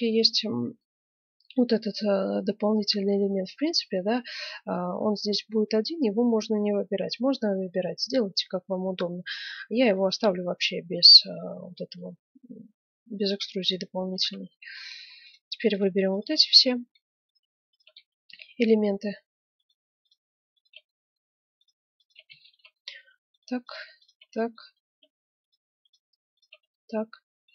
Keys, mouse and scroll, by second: 0.7-6.3 middle drag, 6.5 middle click, 9.8-11.6 right drag, 10.4-11.8 drag, 11.8-13.5 middle drag, 13.5 right click, 14.4-16.0 middle drag, 16.1 middle click, 16.1 right click, 16.4-19.4 middle drag, 19.4 click, 19.5 middle click, 20.0 right click, 20.8-26.4 middle drag, 26.4 right click, 26.7-27.5 middle drag.